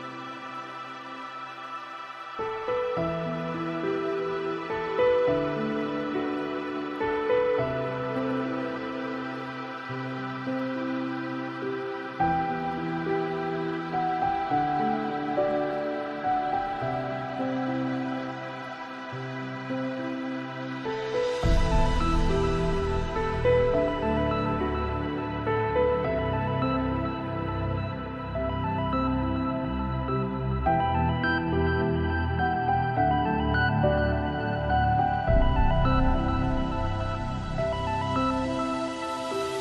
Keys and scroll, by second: 23.9 ctrl+x.